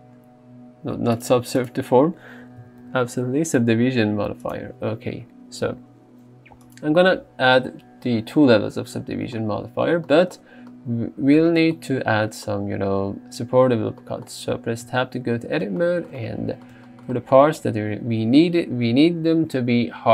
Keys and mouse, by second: 1.2 click, 1.6 click, 4.6 click, 14.9 Tab, 15.8 shift+middle click.